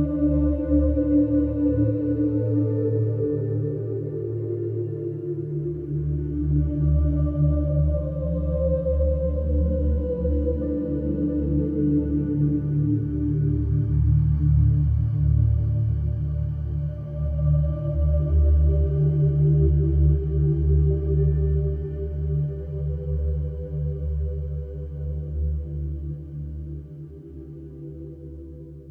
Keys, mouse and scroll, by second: 2.0 shift+a, 3.4 alt+middle drag, 4.5 scroll down 4, 5.0 g, 6.4 g, 7.9-8.9 scroll up 12, 8.4 shift+middle drag, 8.9-9.4 shift+middle drag, 9.4 g, 10.9 g, 14.0 alt+middle drag, 14.3 scroll down 4, 14.9 g, 16.5 scroll up 1, 16.8 shift+middle drag, 17.0-17.8 scroll up 11, 17.5 shift+middle drag, 18.0 shift+middle click, 18.9 g, 22.0-22.5 right drag, 22.5 scroll down 2, 22.8-23.3 middle drag, 23.3-23.8 scroll down 1, 23.8 scroll down 1, 24.0 alt+middle click, 24.3 alt+middle click, 24.6-25.0 scroll up 4, 25.0-25.6 shift+middle drag, 25.6 g, 27.3-27.8 scroll down 11, 27.9-28.3 middle drag, 28.3 click, 28.6 scroll down 1.